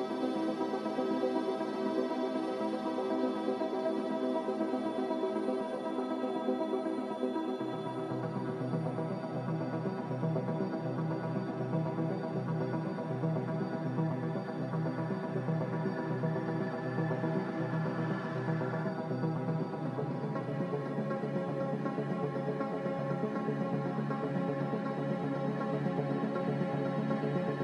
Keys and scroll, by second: 10.2 z, 26.9 z.